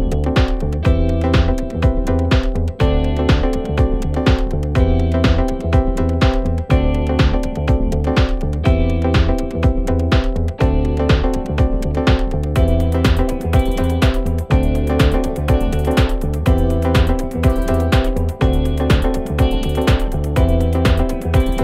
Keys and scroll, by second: 21.3 5.